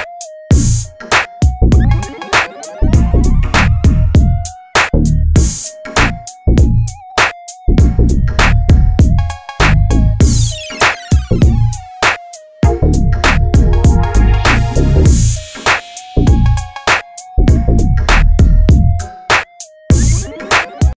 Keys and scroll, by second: 6.5 ctrl+c, 6.7 ctrl+shift+v, 8.2 Up, 8.4 Left, 8.5 Right, 9.3 ctrl+c, 9.4 ctrl+v, 9.9 ctrl+z, 17.6 Right, 17.7 Up, 18.9 Down, 19.1 Left.